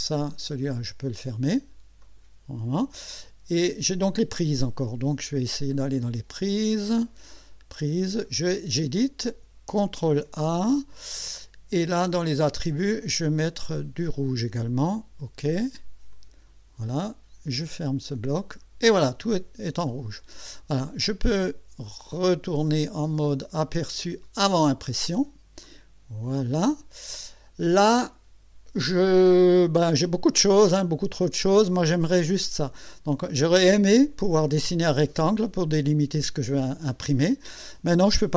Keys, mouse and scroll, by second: 2.0 click, 5.1-6.5 scroll down 6, 7.4 click, 8.2 click, 10.0 ctrl+a, 12.5 click, 13.7 click, 14.7 click, 16.1 click, 17.7 click, 19.3-19.7 scroll up 1, 19.9 scroll down 1, 24.2 click, 25.6 middle click, 26.6-27.0 scroll up 2, 28.5 scroll down 2, 28.7 middle click, 29.6 scroll down 2, 29.9-31.0 middle drag, 31.1-31.5 scroll up 2, 33.0 scroll up 2, 33.7 middle click.